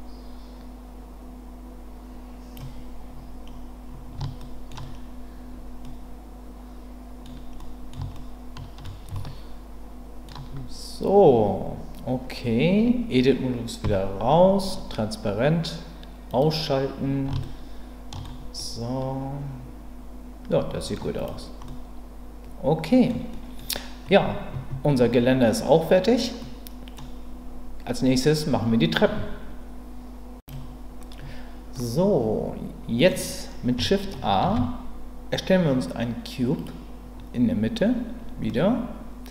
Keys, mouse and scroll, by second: 4.4 shift+middle click, 5.8-7.2 middle drag, 7.6 middle click, 8.1 shift+middle click, 9.2-10.3 ctrl+middle drag, 13.8 Tab, 16.4 click, 17.4-18.2 shift+middle drag, 18.6-20.9 middle drag, 21.1 click, 21.6-23.1 middle drag, 23.3 middle click, 26.4 middle click, 30.7 typing, 34.4 shift+a, 38.5-39.3 middle drag.